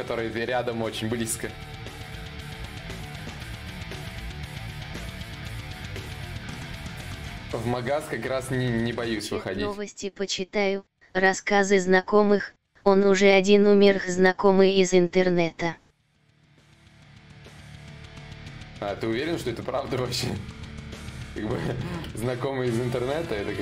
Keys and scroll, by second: 11.9 b, 13.5-16.6 typing, 18.9 x, 21.6 ctrl+z, 21.6 ctrl+y, 23.4-23.6 typing.